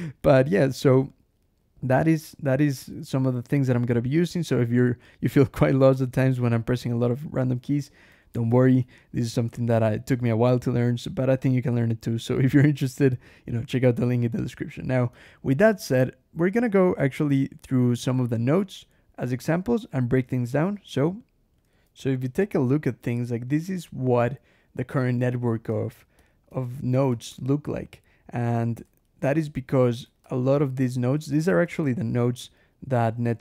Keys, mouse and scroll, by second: 0.0-3.4 typing, 2.9 shift+Escape, 4.6 j, 6.3 ctrl+shift+l, 6.6 ctrl+shift+h, 6.8 ctrl+shift+l, 7.9 Escape, 8.2 k, 9.3 Escape, 9.6 j, 10.5 k, 11.9 Escape, 12.1 k, 13.4 j, 14.9 k, 15.4 j, 16.5 j, 17.7 k, 21.4 \, 21.6 ctrl+g, 22.1 Escape, 25.7 ctrl+shift+l, 26.0 ctrl+shift+h, 26.5 ctrl+shift+Escape, 27.0 ctrl+alt+shift+h, 27.2 ctrl+alt+shift+Escape, 28.4 click, 28.7 Escape, 28.9 j, 29.5 k, 29.9 alt+Return, 30.1 alt+Escape, 31.0 Escape, 31.3 alt+h, 31.6 alt+j, 31.9 alt+k, 32.5 alt+l, 32.8 alt+Escape, 33.1 alt+h, 33.2 alt+Escape.